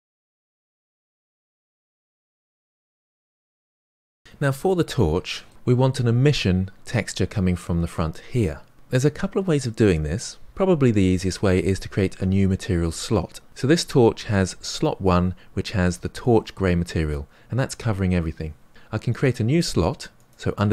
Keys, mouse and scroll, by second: 0.7 click, 0.8 shift+click, 1.0 ctrl+l, 1.1 shift+middle click, 1.4 click, 2.2 shift+middle click, 2.3 scroll down 1, 2.7 click, 4.0 click, 4.6-5.5 shift+middle drag, 5.5-7.2 scroll up 6, 7.2-10.9 scroll up 1, 20.1-20.7 drag.